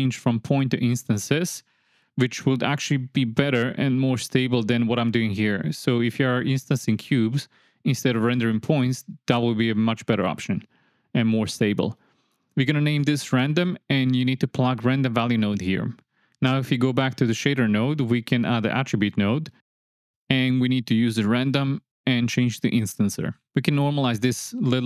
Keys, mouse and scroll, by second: 0.4-2.0 alt+drag, 2.5 click, 3.5 middle click, 4.1 click, 5.9 click, 7.0 m, 8.1 space, 9.4 space, 9.9 click, 10.2-12.2 drag, 11.0 BackSpace, 11.1 BackSpace, 13.0 click, 13.2-13.6 drag, 13.8 click, 14.1 click, 14.5 click, 17.3 click, 17.9-19.1 drag, 19.5 shift+a, 20.5 click, 20.8-21.8 drag, 22.8-23.4 drag.